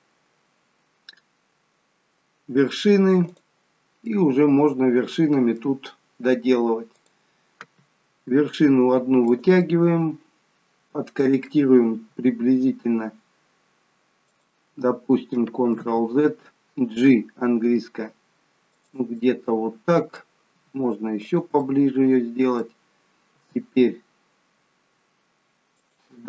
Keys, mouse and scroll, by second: 1.8-3.3 scroll up 1, 3.3 click, 4.1 middle click, 7.0 click, 8.3 e, 9.8 middle click, 12.1 e, 17.6 g, 19.2 middle click, 20.6 g, 21.7 middle click, 23.4 g.